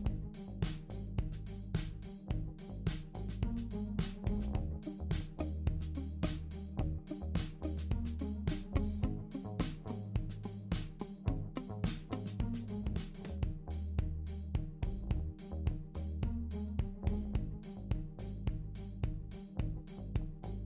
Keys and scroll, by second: 6.9 ctrl+shift+g, 9.5 shift+super+g, 13.7 i, 14.9 r, 16.3-17.1 typing, 19.4-20.2 typing.